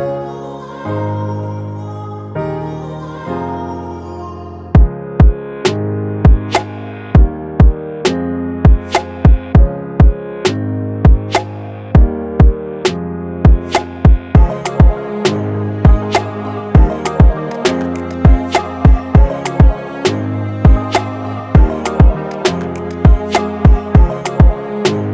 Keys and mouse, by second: 0.7 right click, 2.1-6.5 drag, 7.9-9.8 alt+shift+drag, 9.9-12.2 drag, 14.7-19.8 drag, 19.9 Down, 20.6 click, 21.5 z, 22.6 click, 22.9 Up, 23.9 click.